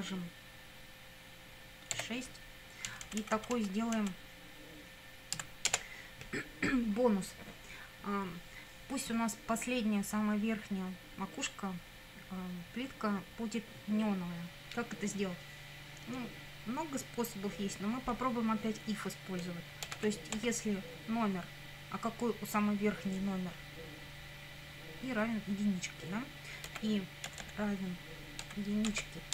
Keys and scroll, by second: 1.9 6, 2.9 Down, 5.4 End, 5.7 Return, 19.6-20.5 typing, 26.7 i, 27.3 =, 28.4-29.3 typing.